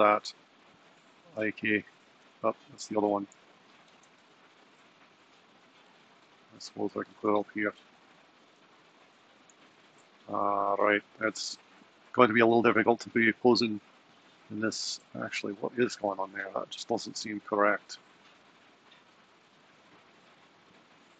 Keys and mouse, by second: 0.9 click, 1.5 g, 2.9 click, 3.5 g, 8.7 g, 12.2 r, 13.1 r.